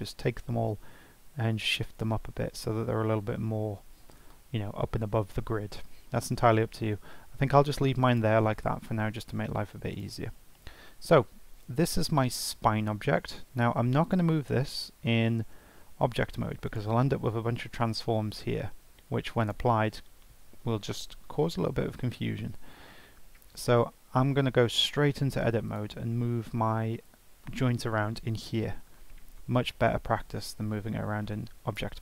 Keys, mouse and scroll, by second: 0.7 g, 8.0 click, 8.6-8.9 scroll up 3, 9.2-9.9 shift+middle drag, 9.9 click, 10.3 scroll down 4, 11.0-12.0 scroll up 3, 12.0-12.4 scroll down 1, 12.4 scroll up 1, 14.0 click, 14.5-14.8 scroll up 2, 15.9 g, 18.6 ctrl+a, 22.5 ctrl+z, 22.9 ctrl+z, 24.8 Tab, 25.6 click, 27.1 g, 31.7 g.